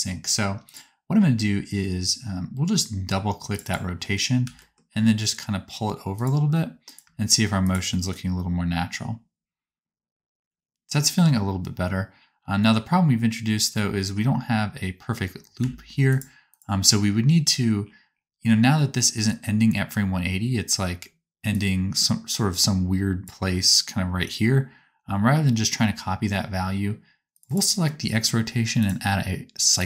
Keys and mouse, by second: 3.6 click, 3.6 right click, 4.3 g, 6.8 click, 6.8 right click, 7.1 space, 14.1 space, 15.5 a, 16.1 click, 16.5-21.4 drag, 27.3-28.8 drag.